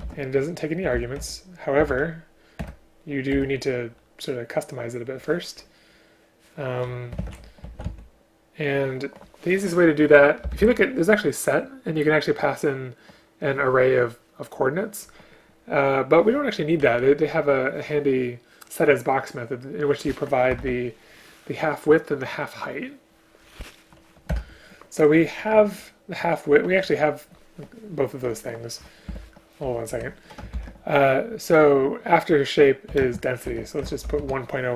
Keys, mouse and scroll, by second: 0.1 ctrl+p, 2.7 Return, 3.5 Return, 10.5 BackSpace, 10.7 BackSpace, 16.9 Down, 20.7 ctrl+q, 24.4 Return, 29.2 Escape, 29.8 Down, 30.1 Left, 30.7 ctrl+p, 33.1 space.